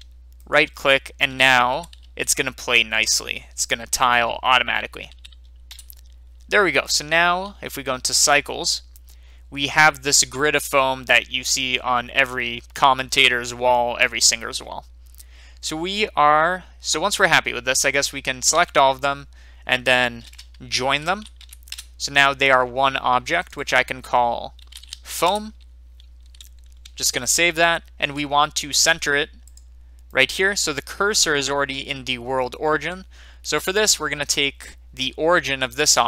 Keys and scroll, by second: 1.7 g, 2.0 y, 5.1 4, 5.7 Return, 20.2-21.7 typing, 24.7-25.6 typing, 27.0 ctrl+s, 32.1 typing.